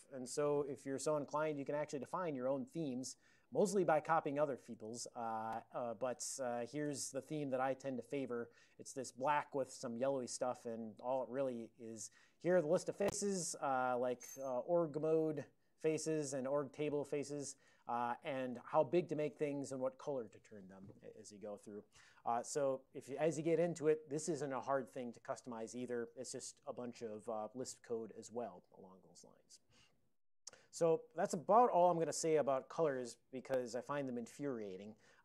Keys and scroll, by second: 1.4 ctrl+x, 1.6 d, 1.9 Return, 4.2 typing, 4.7 Return, 6.0-6.9 typing, 10.8 ctrl+p, 11.3 ctrl+p, 11.4 ctrl+p, 11.7 ctrl+n, 12.6 ctrl+n, 13.1-14.3 ctrl+n, 14.3-15.8 typing, 16.7 ctrl+a, 18.0 ctrl+p, 18.0 a, 18.7 alt+f.